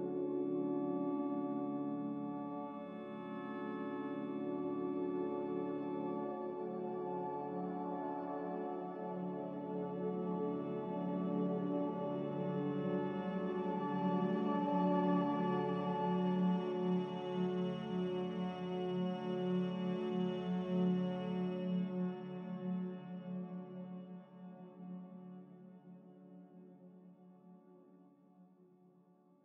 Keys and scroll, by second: 0.1 Return, 0.1 0, 3.1 m, 20.4 a, 26.5 5, 27.7 2.